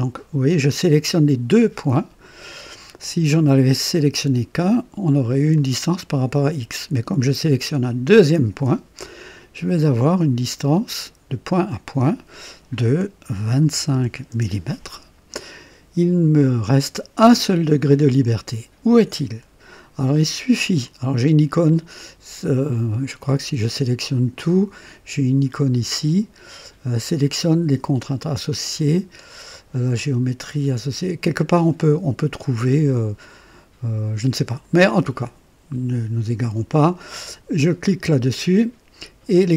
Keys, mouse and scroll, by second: 3.3 click, 5.5 click, 8.1 click, 11.6 click, 13.6 KP_2, 13.9 KP_5, 14.3 KP_Enter, 23.2-24.3 drag, 34.5 click, 38.2 click.